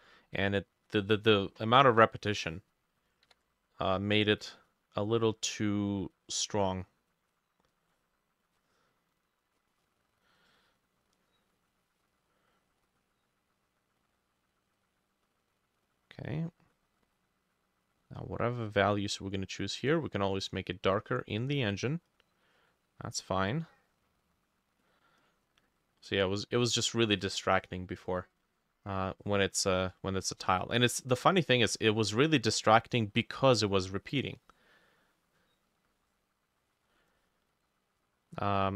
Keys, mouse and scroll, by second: 3.0-9.9 ctrl+drag, 3.0 ctrl+middle click, 3.3 ctrl+u, 11.6-27.2 drag, 37.1-38.7 drag.